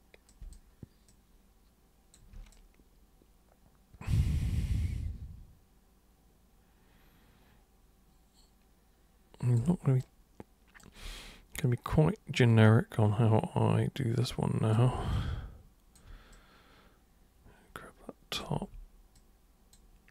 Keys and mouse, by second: 0.3 super+click, 1.1-2.1 super+drag, 2.5-9.6 alt+super+drag, 10.0 super+right click, 11.2-14.7 alt+super+drag, 15.1 super+click, 16.3-18.4 alt+super+drag, 18.5 super+e, 19.1 super+click.